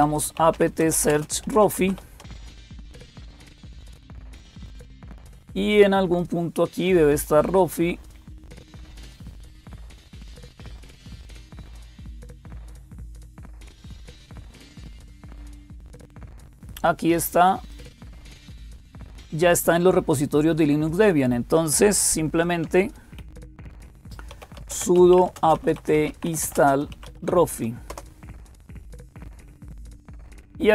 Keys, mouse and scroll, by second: 0.0-30.7 typing, 17.5-19.3 drag.